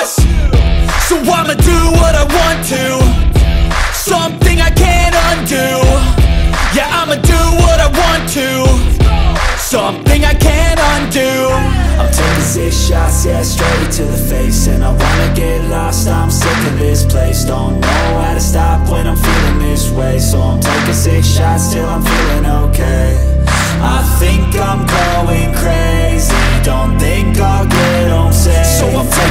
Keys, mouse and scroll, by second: 0.7 KP_1, 1.2-1.5 scroll up 2, 1.5 s, 2.6-3.3 scroll up 4, 3.3 s, 4.7 KP_3, 5.1 scroll down 1, 5.2 shift+middle click, 5.7 click, 6.5 scroll up 2, 6.8-8.3 shift+middle drag, 8.3-10.0 drag, 13.2 click, 13.4-13.7 scroll down 3, 13.7 click, 13.9 middle click, 14.3 scroll up 1, 14.5-16.0 middle drag, 16.0-16.4 scroll down 3, 16.4 middle click, 17.2 KP_1, 17.5-17.8 scroll down 1, 17.8 shift+middle click, 18.2 scroll up 1, 18.4-20.0 shift+middle drag, 20.0-20.5 scroll down 1, 20.6 click, 21.4 g, 22.6 m, 26.4-27.7 drag, 27.7 shift+a, 29.0 r.